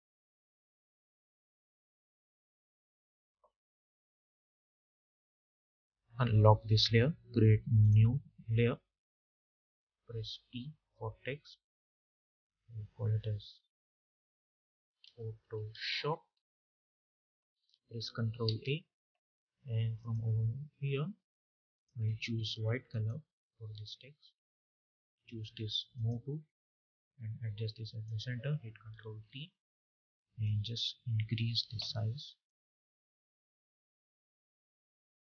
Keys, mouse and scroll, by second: 0.4-1.4 typing, 2.5 Return, 5.3 click, 7.6 click, 10.2 t, 11.8 click, 13.4 shift+p, 19.8-22.8 drag, 25.8-29.1 drag, 29.1 ctrl+t, 30.3-35.2 drag.